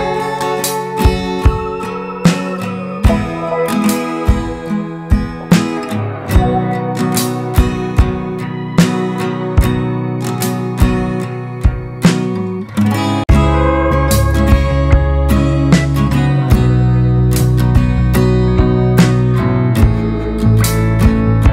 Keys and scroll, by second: 11.5 ctrl+shift+], 12.4 ctrl+f, 13.2 ctrl+[, 19.1 ctrl+space.